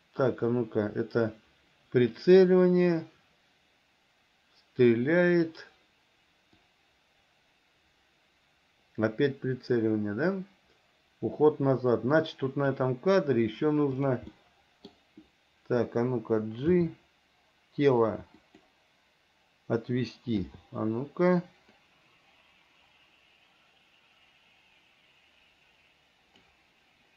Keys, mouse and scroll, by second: 6.9-13.0 drag, 14.6 middle click, 16.9 g, 22.0-26.7 drag.